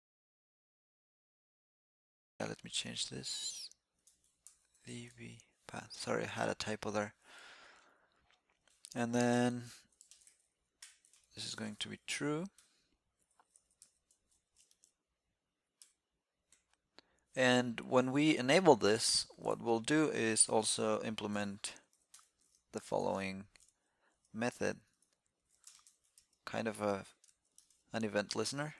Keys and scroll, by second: 26.1 alt+e.